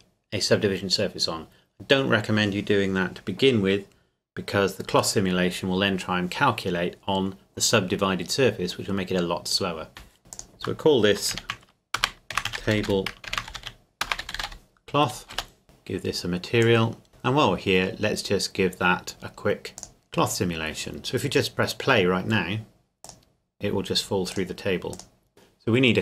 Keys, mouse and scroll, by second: 10.3 click, 11.3-14.5 typing, 15.3 Return, 15.6 click, 19.8 click, 23.0 click.